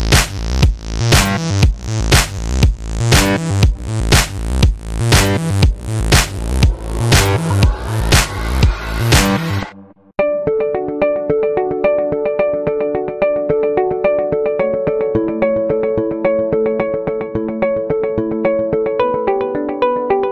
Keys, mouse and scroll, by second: 0.2 alt+right click, 0.4 alt+click, 0.7 alt+middle click, 0.8 alt+click, 1.0 alt+right click, 1.0 alt+click, 1.2 alt+middle click, 1.4 alt+click, 1.5 alt+right click, 1.9 alt+click, 2.0 f, 2.2 ctrl+click, 2.9 f, 3.0 alt+click, 3.2 f, 3.3-5.4 drag, 5.4 alt+middle click, 5.8 alt+right click, 6.0 alt+click, 6.9 alt+middle click, 7.0 alt+click, 7.4 alt+right click, 7.5 f, 7.7-10.1 drag, 10.1 alt+middle click, 10.4 alt+click, 10.6 alt+middle click, 10.7 alt+click, 10.9 alt+right click, 11.3-12.4 alt+shift+drag, 12.4 c, 12.6-14.4 drag, 14.4 g, 14.7-15.7 drag, 15.7 f, 15.8 click, 16.8 alt+middle click, 16.9-18.2 alt+drag, 18.2 alt+click, 18.5 alt+right click, 18.6-20.3 alt+drag.